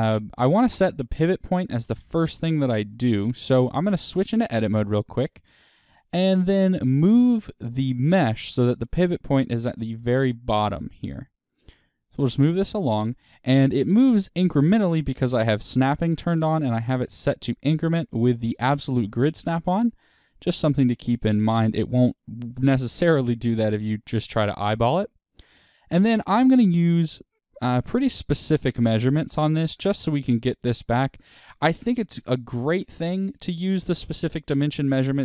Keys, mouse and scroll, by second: 2.9 KP_1, 3.9 Tab, 5.3-6.0 scroll up 2, 9.9 g, 13.1 click, 16.2-18.0 drag, 21.3-27.6 middle drag, 22.3 Tab, 24.3-24.7 scroll down 2, 27.6 KP_1, 28.8 click, 29.4-35.2 middle drag, 30.9-34.0 scroll down 2, 34.0-34.9 scroll down 1.